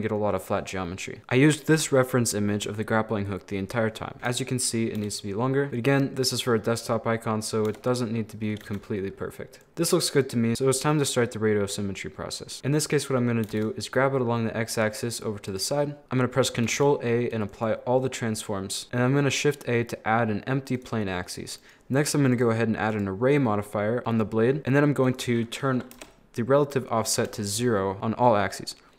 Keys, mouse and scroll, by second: 0.2 scroll down 3, 4.1 KP_1, 5.0 g, 6.1 scroll down 1, 6.2-7.7 middle drag, 7.7 Tab, 7.9 middle click, 8.6 z, 8.9-12.6 middle drag, 12.6 ctrl+z, 13.5 g, 15.8 scroll down 2, 15.9 middle click, 16.0 ctrl+a, 16.7 ctrl+a, 18.6 middle click, 18.8 shift+a, 21.6 right click, 22.3-24.0 drag, 24.0 KP_7, 25.1-27.9 drag.